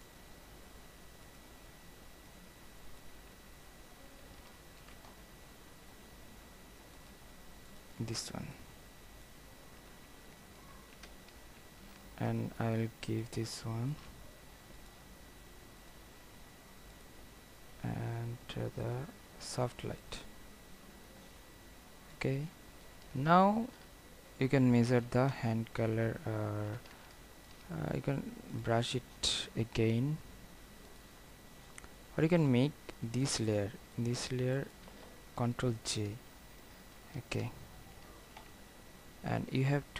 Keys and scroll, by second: 4.9 ctrl+alt+z, 11.1 ctrl+t, 35.9 ctrl+j.